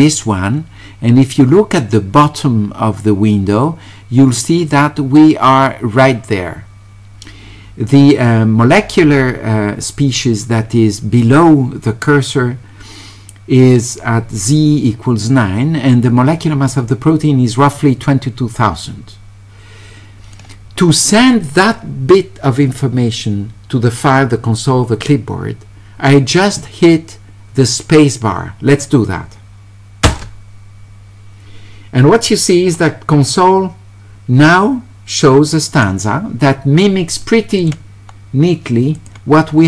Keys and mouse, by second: 30.1 space, 33.3 click, 37.6 click, 38.9 click.